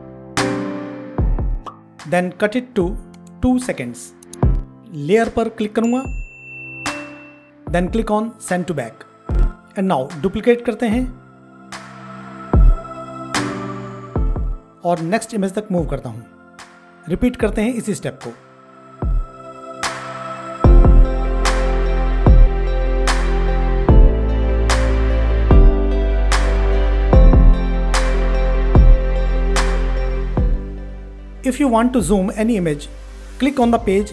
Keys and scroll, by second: 17.6 ctrl+d, 21.7 ctrl+d, 25.0 ctrl+d, 28.5 ctrl+d.